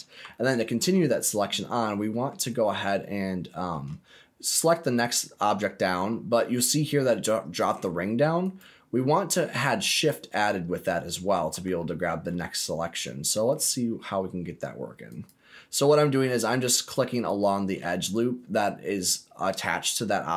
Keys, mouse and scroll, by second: 0.3 alt+middle click, 1.0-1.6 scroll down 2, 1.6 middle click, 2.5-2.8 scroll up 3, 3.0 shift+middle click, 4.8 alt+click, 7.5 click, 8.4 alt+click, 9.9 alt+shift+click, 12.0 ctrl+z, 13.4 alt+shift+click, 15.0 alt+shift+click, 17.1 alt+shift+click, 18.2-18.5 scroll down 1, 18.5-20.3 middle drag.